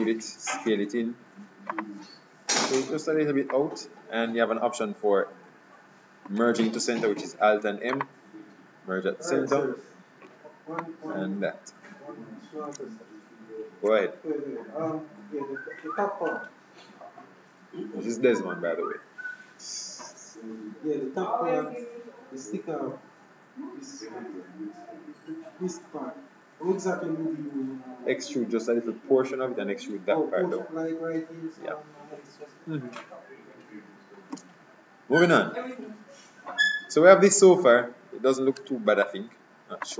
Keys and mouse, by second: 0.7 s, 2.7-4.4 drag, 6.4 alt+m, 9.6-11.2 drag, 34.4 KP_3, 36.3-37.6 middle drag, 37.9-39.9 middle drag.